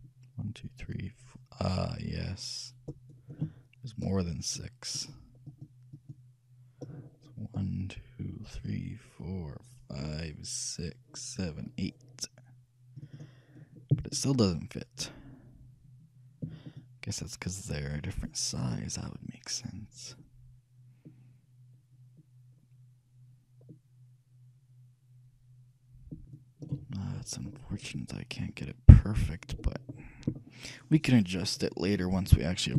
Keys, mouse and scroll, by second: 4.5-7.9 drag, 8.5 middle click, 13.1-15.1 drag, 15.1 middle click, 16.9-18.7 shift+drag, 27.3-30.2 middle drag, 30.5-32.7 middle drag.